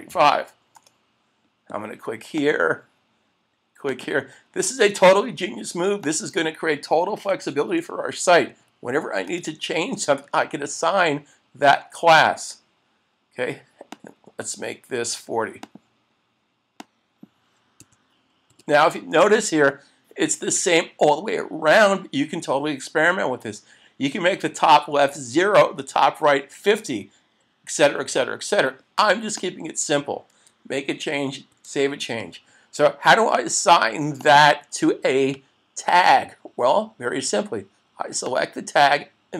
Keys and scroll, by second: 0.8 Return, 9.3 Return, 31.5 super+s.